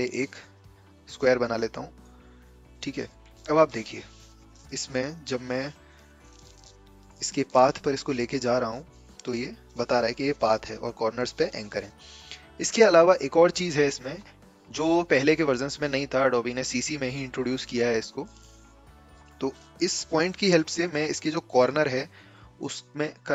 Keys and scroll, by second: 8.7 a.